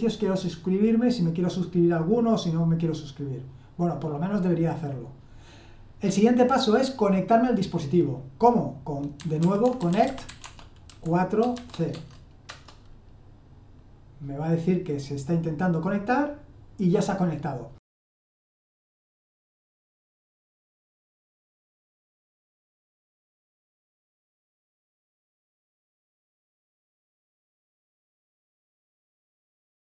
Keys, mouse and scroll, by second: 8.9-12.6 typing, 24.2-26.4 typing.